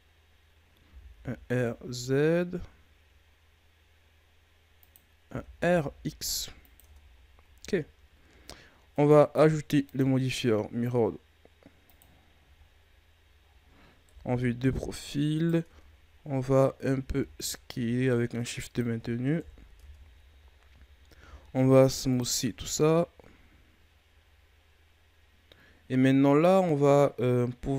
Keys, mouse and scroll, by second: 0.8 r, 5.2 r, 6.8 Tab, 7.1-8.2 scroll down 8, 7.4 a, 8.2-8.9 scroll up 6, 8.9 right click, 9.8-12.4 drag, 12.4 a, 12.5-13.4 scroll down 5, 13.4-14.0 scroll up 1, 14.0 KP_3, 14.9-15.3 scroll up 1, 15.3 right click, 15.6 Tab, 16.9 s, 19.3 KP_1, 19.7 Tab, 21.2 w, 22.4 a, 22.6-23.3 scroll down 2, 23.3-24.2 scroll down 9, 24.2-25.6 scroll up 7.